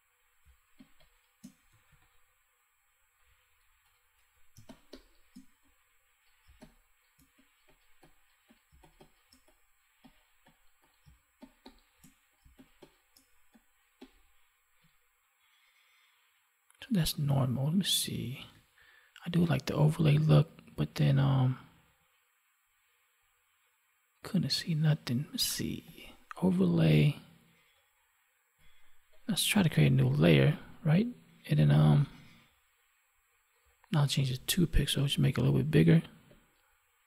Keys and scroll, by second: 0.3 space, 3.8 ctrl+=, 4.5 space, 8.6 space, 11.0 space, 18.3 ctrl+1.